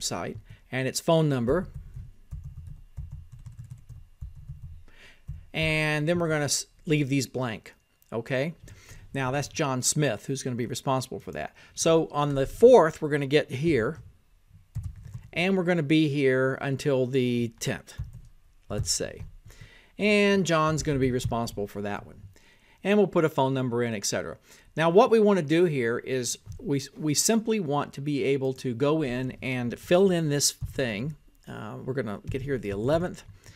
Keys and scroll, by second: 17.2 shift+j, 18.1 o, 19.6-21.5 typing, 23.2-26.6 typing, 28.2-33.5 typing.